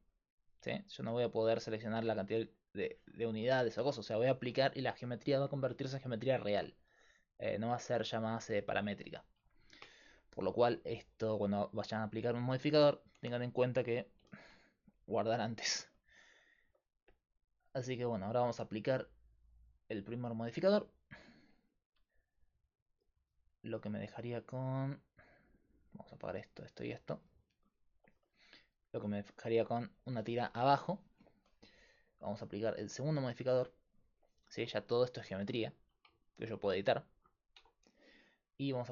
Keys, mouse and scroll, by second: 3.3-7.9 middle drag, 8.3 middle click, 20.3-30.4 drag, 27.7-30.5 right drag, 30.5 click, 30.7-34.6 right drag, 32.1-34.8 drag, 34.6 Tab, 35.3 a, 35.5 a, 35.8 a, 37.1 a, 37.6 Tab.